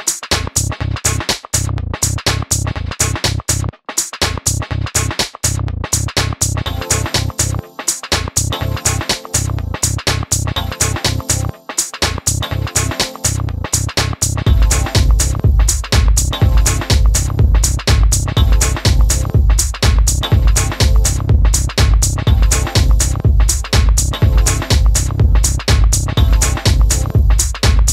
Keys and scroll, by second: 11.9 super+z.